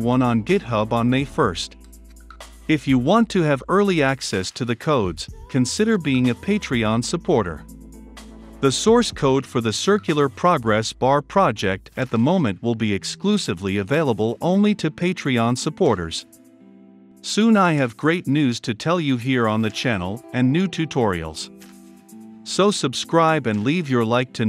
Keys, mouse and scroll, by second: 1.0 ctrl+F5, 2.0-9.4 drag, 9.4 Return, 10.2 ctrl+F5, 11.4-19.1 drag, 19.3 ctrl+F5, 20.4-24.4 drag.